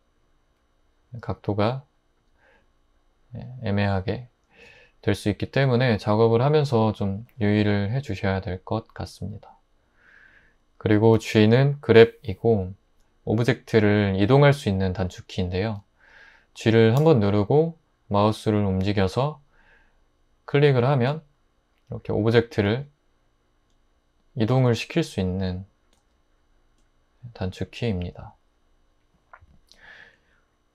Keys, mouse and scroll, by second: 17.0 g, 22.7 g, 24.7 g, 26.0 g.